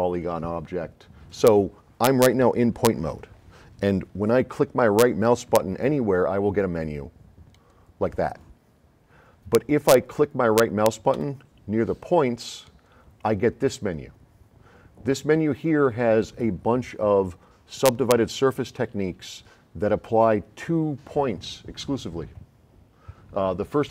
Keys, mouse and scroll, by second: 7.6 right click, 11.2 Escape, 12.7 right click.